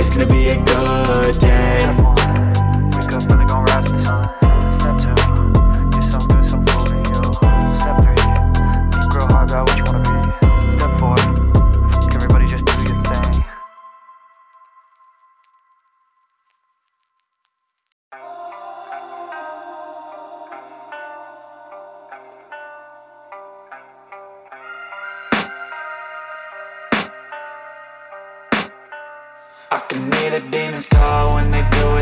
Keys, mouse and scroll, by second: 5.8 double click.